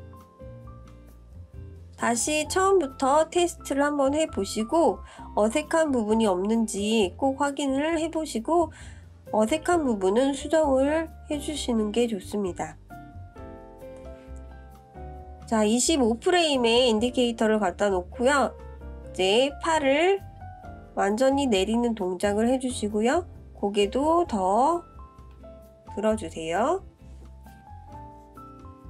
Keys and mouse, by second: 2.9-4.9 drag, 6.5 click, 7.4 space, 8.3 click, 11.5 space, 14.5 space, 15.8-16.7 drag, 18.8-19.8 drag, 21.7-22.8 drag, 25.7 click, 27.0-28.8 drag.